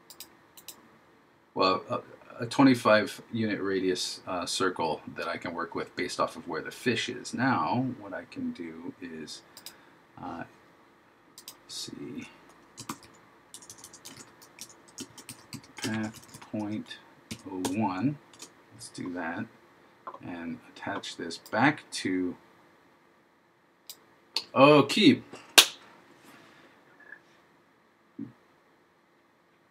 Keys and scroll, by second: 13.0 shift+f, 14.3 shift+p, 15.1 shift+p, 16.0 shift+p.